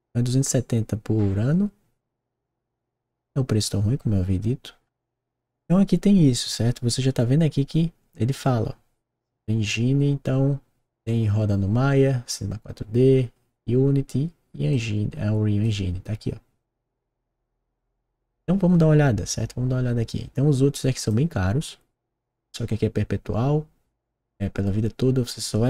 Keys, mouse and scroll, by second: 2.4-14.7 middle drag, 14.7 click, 20.9 click.